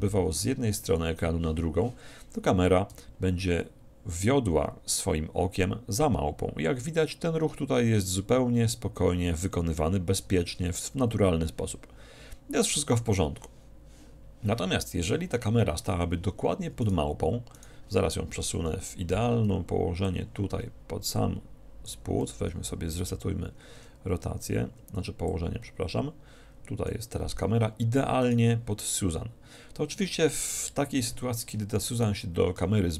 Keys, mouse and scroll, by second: 3.0 g, 16.9-19.4 right drag, 18.4 KP_1, 18.6 KP_3, 20.1-22.0 drag, 23.8 alt+g, 25.4-27.1 drag, 28.2-30.2 right drag, 30.6 KP_1, 32.0-32.9 right drag, 32.8 g.